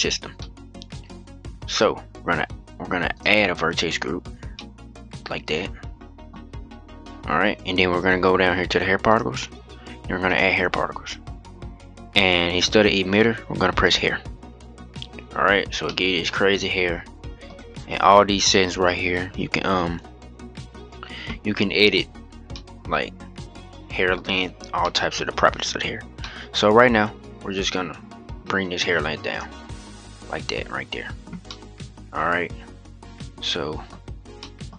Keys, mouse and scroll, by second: 0.1-2.9 middle drag, 2.9-4.3 drag, 4.3-8.3 middle drag, 8.8-9.6 drag, 10.0-13.0 drag, 13.6 click, 14.7-15.6 scroll down 9, 15.6-17.3 middle drag, 17.3-17.9 scroll up 3, 17.9-19.3 scroll down 10, 19.3-19.6 scroll down 7, 21.6-21.9 scroll up 3, 21.9-22.3 scroll down 5, 22.3-23.9 middle drag, 23.9-24.6 scroll up 3, 24.6-26.9 middle drag, 26.9-29.7 drag, 29.7 scroll up 2, 31.2-33.8 middle drag, 33.8-34.1 scroll up 2, 34.1-34.5 middle drag, 34.5-34.7 scroll down 1.